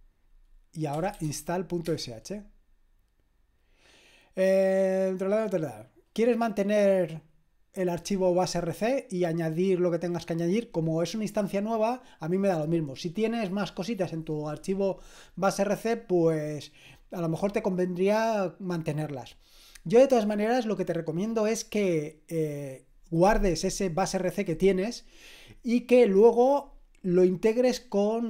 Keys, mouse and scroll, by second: 0.0-1.8 typing, 1.8 Return.